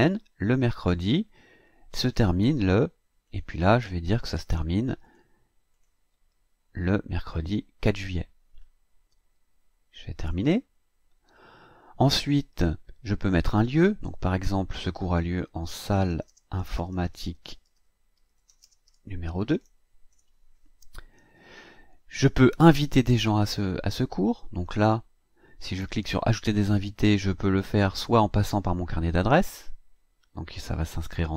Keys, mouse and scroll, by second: 2.6 click, 3.3 click, 4.4 click, 5.0 click, 5.7 click, 7.8 click, 10.2 click, 13.4 click, 14.6-20.1 typing, 24.8 click.